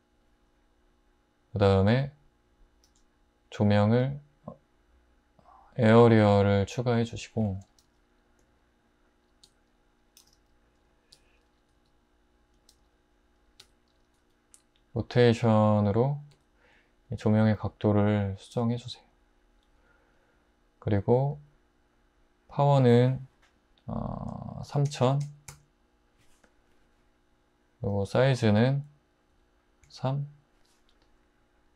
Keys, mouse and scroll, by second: 2.9 shift+a, 7.9 g, 9.5-14.2 typing, 16.3 `, 17.6 r, 18.6 g, 24.7-25.5 typing, 29.3 3, 29.9 Return.